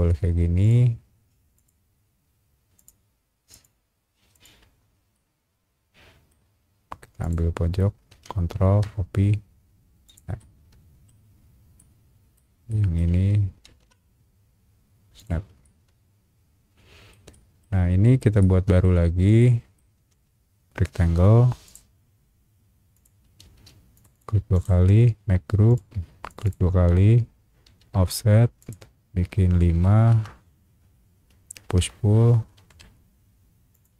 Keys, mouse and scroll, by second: 0.6 click, 1.5 click, 2.7 click, 3.5 click, 4.3 click, 4.6-5.0 scroll up 2, 5.1-6.3 middle drag, 6.4 scroll down 1, 7.2 click, 10.0 shift+click, 10.4 shift+middle click, 11.4 scroll down 1, 11.8 shift+middle click, 12.7 shift+middle click, 13.6 ctrl+v, 15.1 click, 15.6-17.1 shift+middle drag, 17.3 shift+middle click, 18.0 scroll up 1, 18.4 shift+middle click, 18.8-19.1 scroll up 2, 19.4 shift+middle click, 19.9 shift+r, 21.6 click, 22.9 click, 23.5 space, 23.9 click, 24.1 click, 24.5 right click, 25.7 click, 26.3 click, 26.4 click, 27.8 f, 28.6 click, 29.8 KP_5, 30.1 KP_Enter, 30.7 middle click, 31.3 middle click, 31.7 p, 32.7 Escape, 33.7 click.